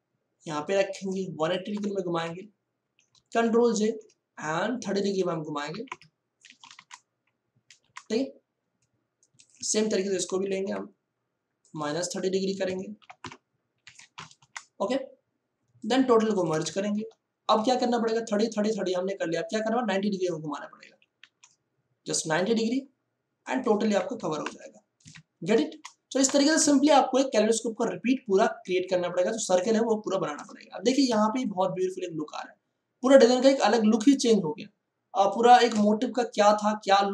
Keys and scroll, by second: 1.7 Return, 2.8 ctrl+e, 3.4 ctrl+j, 3.8 ctrl+t, 5.6 3, 5.8 0, 6.7 Return, 10.1 ctrl+j, 10.4 ctrl+t, 12.6 KP_Subtract, 13.0 3, 13.2 0, 13.8 Return, 16.9 ctrl+e, 20.8 ctrl+j, 21.2 ctrl+t, 24.1 9, 24.5 0, 25.0 Return, 30.8 ctrl+e, 31.2 ctrl+space.